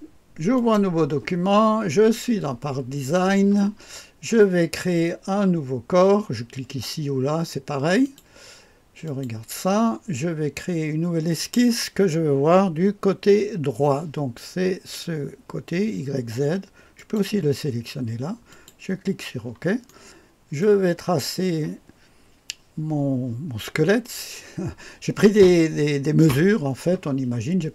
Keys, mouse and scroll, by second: 0.6 click, 8.0 click, 9.1 click, 11.4 click, 17.0 click, 18.5 click, 19.9 right click.